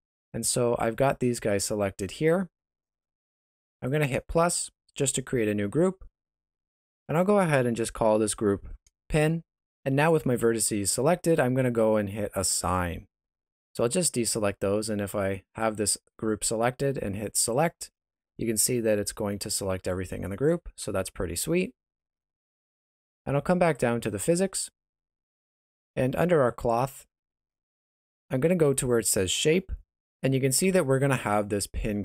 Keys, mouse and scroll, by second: 3.7 click, 6.6 click, 6.8 click, 12.5 click, 13.7 alt+a, 17.5 click, 20.8 alt+a, 21.4 Tab, 23.6 click, 25.3 middle click.